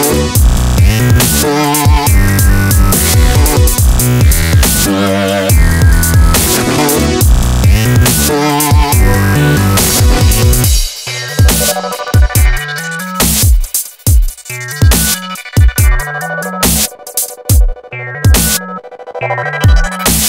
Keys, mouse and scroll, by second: 0.6-2.7 drag, 4.7-5.7 drag, 5.7-7.1 right drag, 7.1 Delete, 9.3 middle click, 10.6 a, 10.8 a, 11.0 a, 11.1 a, 11.3 right click, 11.9 click, 11.9 middle click, 12.6 middle click, 14.0 shift+a, 15.3 KP_5, 15.4 KP_1, 16.4 click, 17.4 click, 18.7 right click, 19.0 click, 19.8 right click.